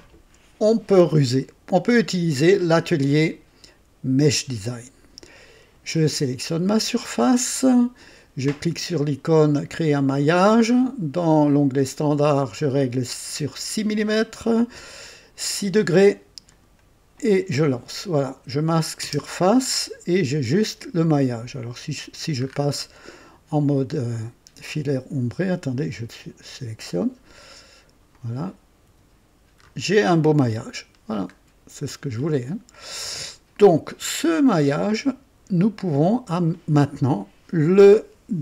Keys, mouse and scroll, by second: 2.6 click, 4.5 click, 6.2 click, 9.8 click, 16.5 click, 19.0 space, 22.4-22.7 scroll up 1, 23.6 &, 24.6 click, 26.2 click, 27.3 &, 28.1 click, 28.9 typing, 29.6-29.9 scroll up 1, 30.8-31.3 scroll down 1, 31.5 typing, 32.7 click, 33.3-38.4 drag, 35.5 typing, 36.9 typing.